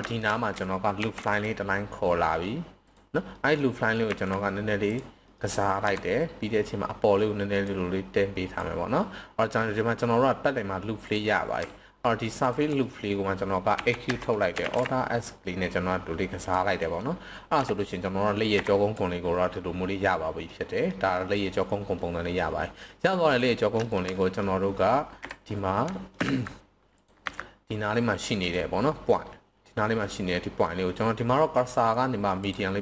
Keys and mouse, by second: 0.1 shift+middle drag, 0.9 ctrl+r, 2.8 click, 3.3 middle click, 4.1 s, 4.8 click, 5.3 middle click, 5.7 KP_3, 7.6 click, 9.0 middle click, 10.9 click, 12.8 middle click, 13.8 e, 14.1 Escape, 14.6 alt+s, 16.4 drag, 16.7 middle drag, 17.5 KP_1, 19.5-20.0 middle drag, 20.4-20.9 middle drag, 22.0 middle click, 23.2 click, 23.8 shift+middle click, 24.2 middle click, 25.1 KP_7, 25.9 shift+middle click, 26.2 z, 27.2 c, 28.4-30.0 right drag, 30.0 middle click, 31.6 click.